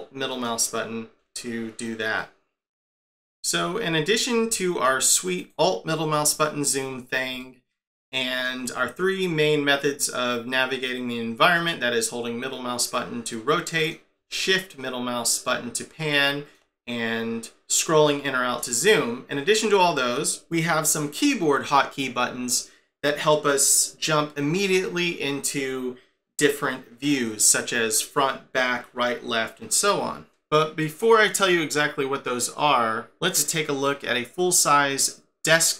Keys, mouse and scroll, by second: 0.3 alt+middle click, 3.5-4.6 scroll down 10, 4.6 shift+middle click, 5.4 click, 6.3 alt+middle click, 6.9 scroll down 4, 7.4 shift+middle click, 12.0 middle click, 17.8 scroll down 7, 18.4-19.0 scroll up 7.